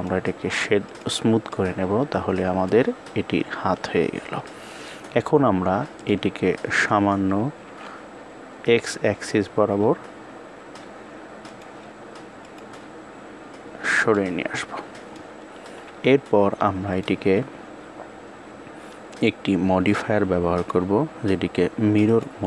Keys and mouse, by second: 0.7 click, 1.4-2.6 middle drag, 3.4 KP_1, 5.8 click, 14.0-15.0 middle drag, 15.7 KP_1, 16.7 click, 20.5-22.1 drag.